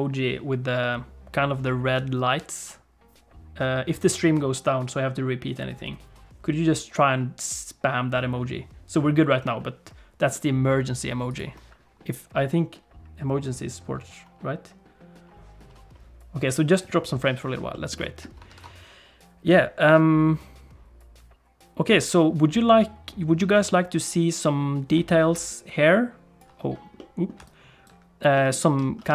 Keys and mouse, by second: 11.3 click, 17.7 middle click, 18.0 shift+middle click, 18.5 ctrl+s, 25.3 d, 25.4-26.4 drag, 26.4 d, 27.0 click, 27.4 d, 27.4 right click, 28.3 click, 28.8 alt+z.